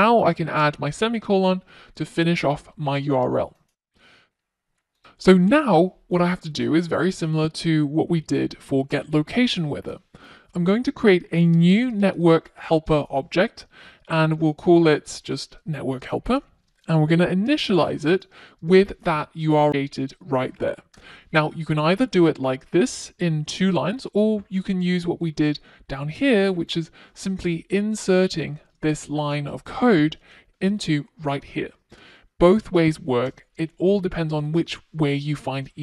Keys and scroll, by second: 9.4 Return, 27.3 super+x, 28.5 super+v.